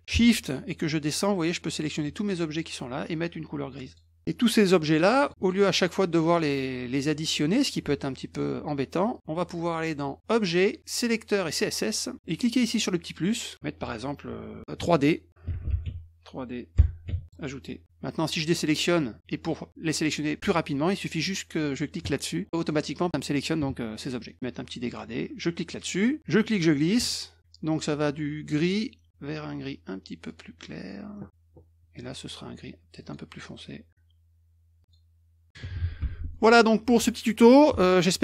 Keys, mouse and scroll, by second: 1.0 shift+click, 3.8 click, 5.2 click, 5.4 shift+click, 6.3 shift+click, 8.3 click, 9.1 shift+click, 11.5 click, 12.8 click, 15.2-17.0 typing, 17.2 click, 18.3 click, 22.0 click, 22.5 middle click, 24.2 middle click, 25.7 click, 26.2-27.4 drag, 30.3 click, 33.0 click, 34.8 click, 36.5 click, 36.8 click.